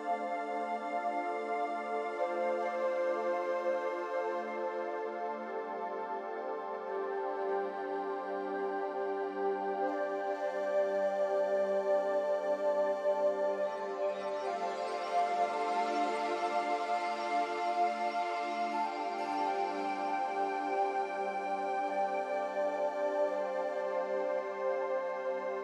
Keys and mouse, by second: 4.1-5.3 drag, 6.4-7.0 middle drag, 9.2-10.3 drag, 11.7-12.6 middle drag, 13.7 Tab, 15.2 click, 16.6-17.6 drag, 19.3 a, 20.4 click, 22.0 g.